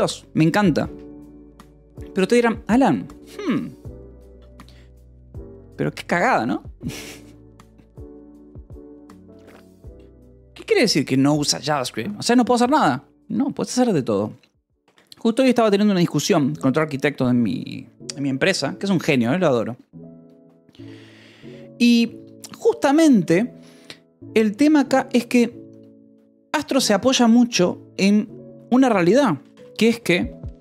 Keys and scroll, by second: 0.2 v, 0.6 Delete, 0.6 p, 26.8 space, 29.5 Return.